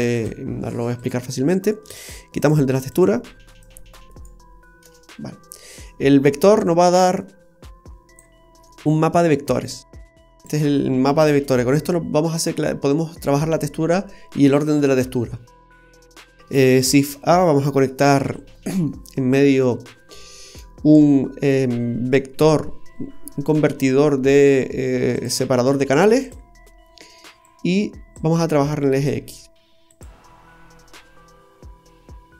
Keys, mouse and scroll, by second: 0.0 click, 1.8 right click, 2.9 click, 3.5 right click, 4.1 right click, 4.8 Delete, 5.4-6.6 scroll up 8, 6.6 click, 8.5-8.9 scroll down 3, 8.9 middle click, 10.0 click, 15.2-15.7 scroll down 2, 15.7 middle click, 17.0 shift+a, 26.2 typing, 27.5 click, 29.1 click, 29.9 click.